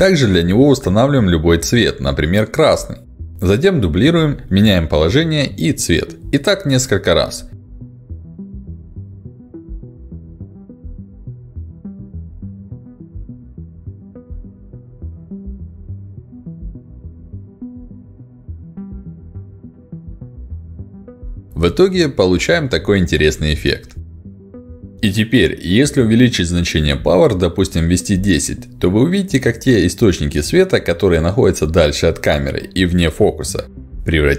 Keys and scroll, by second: 25.6 1, 25.6 0, 26.2 Return.